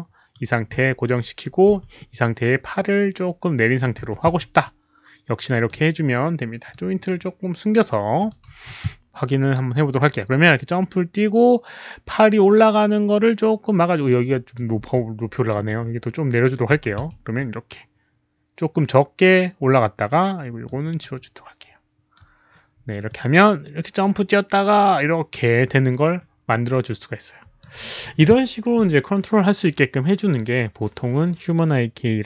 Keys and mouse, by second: 0.7 s, 1.1 click, 1.7 w, 1.9-3.7 middle drag, 3.5-6.1 typing, 3.7 click, 4.6-5.6 drag, 5.6 middle click, 6.6 click, 7.9-8.6 typing, 8.1 click, 8.1 middle click, 9.7-14.5 drag, 11.2-11.9 typing, 11.4 middle click, 14.3-15.5 typing, 15.5-16.5 middle drag, 16.5-17.4 typing, 17.3-20.6 drag, 18.7-21.0 typing, 18.9 middle click, 20.5 middle click, 20.9-22.1 right drag, 23.0-27.5 drag.